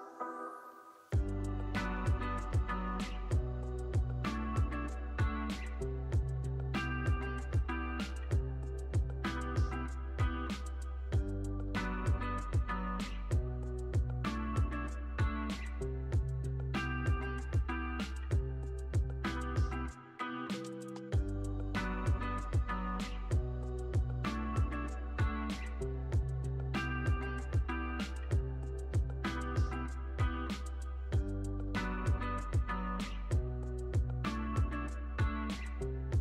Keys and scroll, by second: 0.1 Delete, 1.1 super+c, 2.9 super+v, 15.8 alt+x, 17.8 z, 21.3 super+c, 21.8 alt+x, 22.1 super+v, 23.2 alt+x, 28.4 super+s, 30.0 super+s, 34.1 super+s.